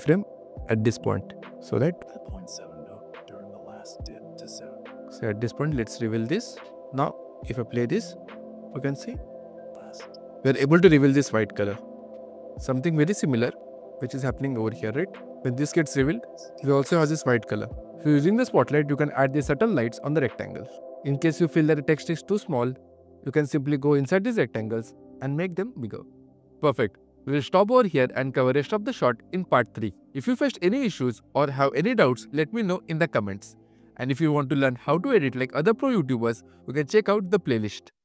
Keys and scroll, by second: 20.7 q.